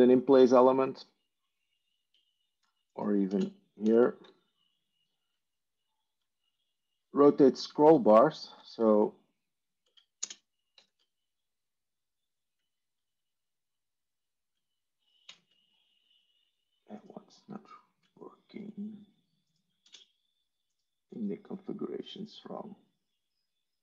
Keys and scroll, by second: 3.2 ctrl+space, 3.7 ctrl+1, 8.6 ctrl+e, 10.1 ctrl+space, 10.6 ctrl+2, 15.1 ctrl+2, 19.7 ctrl+space.